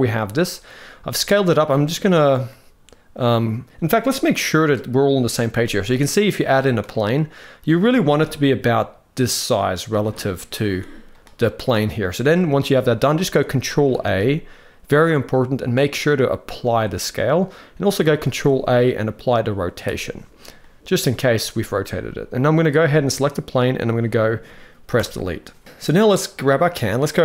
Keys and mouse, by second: 0.9 middle click, 2.1-3.3 middle drag, 5.6-5.9 middle drag, 6.6-7.5 middle drag, 7.8 s, 10.0 middle click, 10.4 s, 11.5 middle click, 13.6 ctrl+a, 17.9 ctrl+a, 20.3-20.7 middle drag, 22.5 click, 24.7 Delete, 26.1 click.